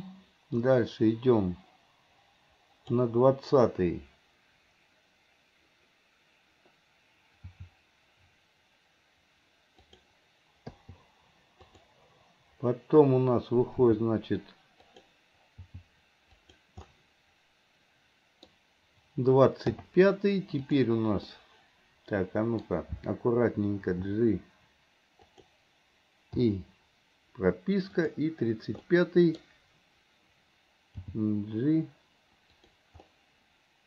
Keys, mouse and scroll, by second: 0.8-3.2 drag, 10.8 i, 11.8 click, 17.0-18.6 middle drag, 20.8 drag, 21.4-24.0 middle drag, 24.0 g, 26.5 i, 28.1 drag, 28.9-31.0 middle drag, 31.0 g, 33.1-33.8 middle drag.